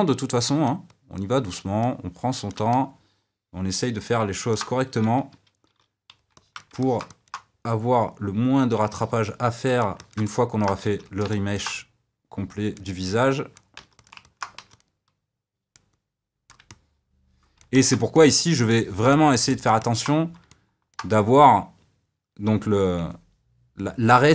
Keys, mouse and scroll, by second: 2.7-5.9 middle drag, 5.9 d, 6.3-8.0 shift+middle drag, 8.0 click, 8.9-10.8 middle drag, 10.8 f, 11.3 middle click, 12.2-13.7 drag, 13.7 f, 14.2 middle click, 14.6 f, 15.3-16.7 drag, 16.7-24.3 middle drag.